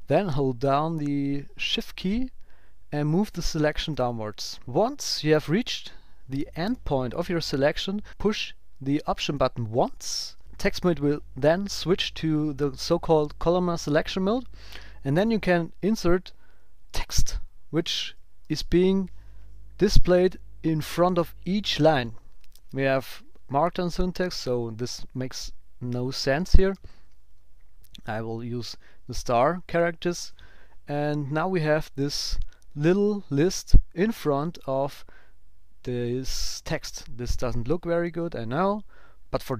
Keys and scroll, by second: 0.3 shift+Down, 4.6 shift+Down, 16.9 shift+,, 18.4 shift+>, 26.3 shift+*, 30.0 ctrl+alt+super+p.